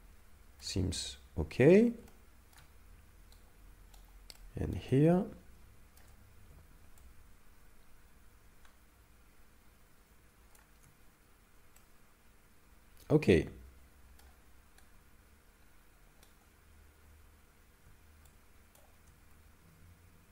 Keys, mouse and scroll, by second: 1.3 scroll down 1, 2.1 shift+middle click, 3.4 right click, 4.4 middle click, 4.9 ctrl+middle click, 7.0 shift+click, 11.8 middle click, 14.9 right click, 18.3 shift+click, 19.6 a.